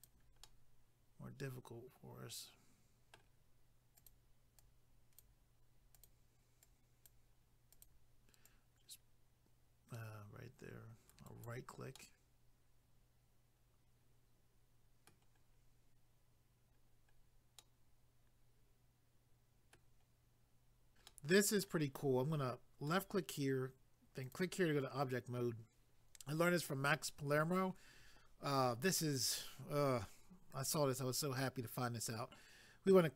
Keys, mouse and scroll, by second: 0.4 middle click, 4.0 click, 6.0 click, 7.7 click, 8.4 click, 11.1 right click, 12.0 middle click, 15.4 scroll down 1, 17.1 scroll down 1, 17.6 middle click, 21.1 middle click, 22.8 click, 24.2 click, 30.1 scroll up 2.